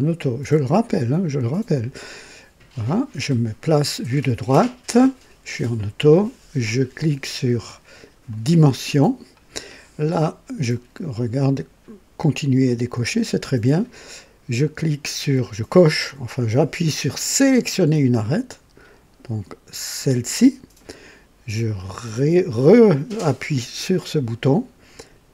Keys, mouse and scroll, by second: 8.3 click, 17.7 click, 20.0 click, 23.5 click.